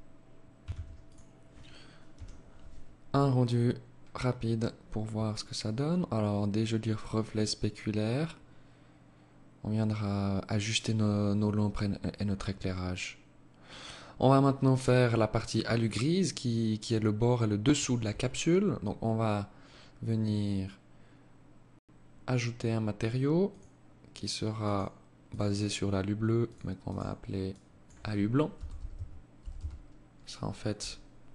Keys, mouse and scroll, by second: 16.6 Escape, 17.7-18.3 scroll up 7, 18.3 scroll down 1, 18.8-19.5 scroll up 3, 22.4 click, 23.6 click, 25.5 click.